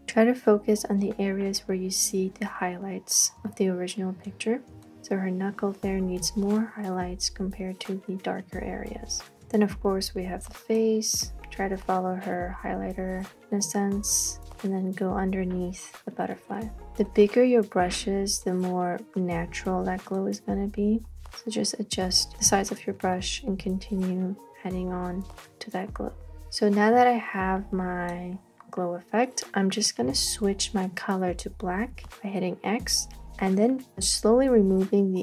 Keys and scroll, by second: 32.0 x.